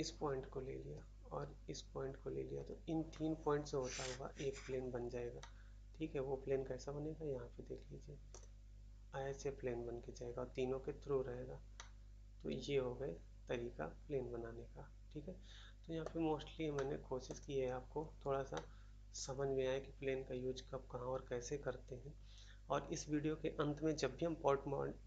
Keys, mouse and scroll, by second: 5.3 middle click, 8.3 middle click, 11.7 middle click, 16.0 middle click, 16.4 scroll down 1, 16.7 middle click, 17.2 middle click, 17.3 middle click, 17.6 scroll up 1, 18.0 scroll down 1, 18.4 middle click, 19.1 middle click, 19.7 middle click.